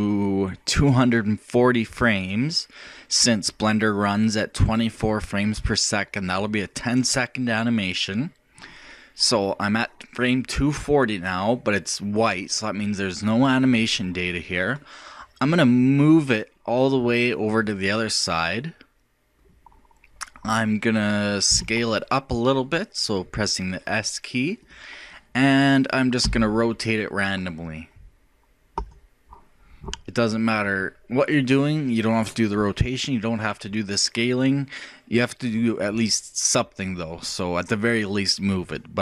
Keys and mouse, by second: 15.8-17.7 drag, 21.5 s, 26.2 r.